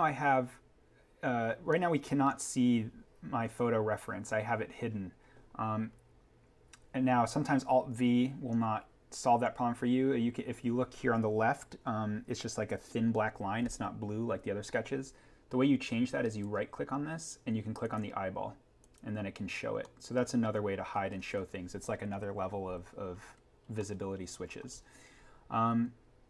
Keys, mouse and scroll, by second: 1.5 scroll down 1, 1.7 scroll, 5.7 scroll down 1, 7.3-7.8 scroll down 1, 16.2 right click, 17.8 click, 19.6 scroll up 1, 19.8 middle click, 21.0-21.6 scroll up 1, 23.7 middle click, 23.9 scroll.